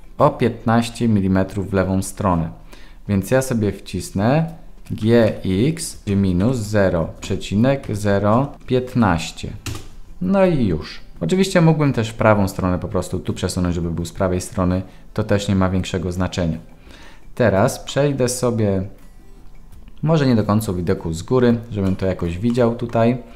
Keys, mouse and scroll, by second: 17.9-21.5 middle drag, 22.0 shift+middle click, 22.6 middle drag.